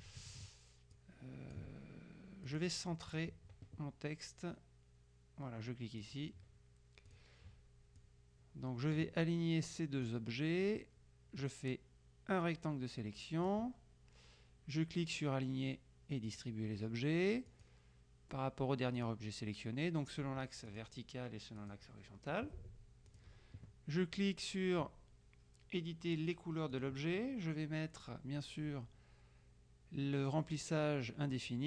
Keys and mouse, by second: 1.1-2.1 drag, 2.5 click, 6.1 click, 7.2 click, 8.1-10.3 drag, 11.5-14.1 drag, 16.3 click, 17.5 click, 19.1 click, 20.7 click, 21.7 click, 23.1 click, 26.8 click, 31.5 click.